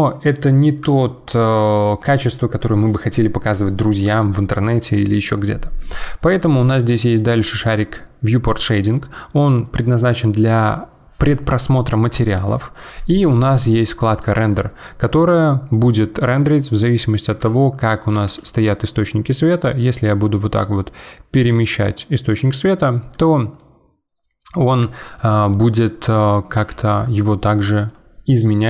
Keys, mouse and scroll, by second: 8.7 click, 14.2 click, 15.2-16.2 middle drag, 16.2 scroll down 3, 16.7-17.8 middle drag, 17.8 click, 18.1 g, 23.6-26.5 middle drag, 26.5 g, 27.2-28.6 middle drag.